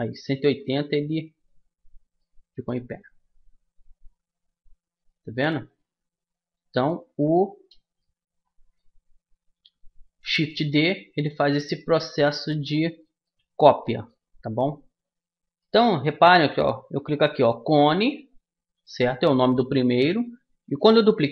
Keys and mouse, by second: 1.8-3.9 middle drag, 3.9 a, 4.4 a, 6.8-7.8 middle drag, 8.2 click, 8.4-9.8 middle drag, 9.8-11.7 drag, 12.2-13.9 drag, 13.9-15.2 middle drag, 17.2-19.0 middle drag.